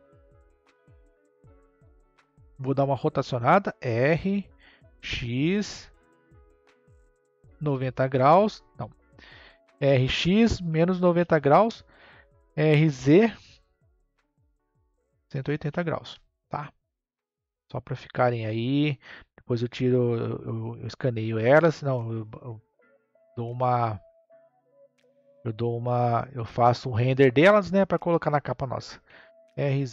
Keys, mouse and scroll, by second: 1.5-3.1 drag, 3.2 r, 9.7 r, 17.8 click, 19.2 click, 20.7 scroll up 2, 23.3 click, 24.8-25.8 scroll down 1, 25.8-28.8 shift+middle drag, 29.0 r.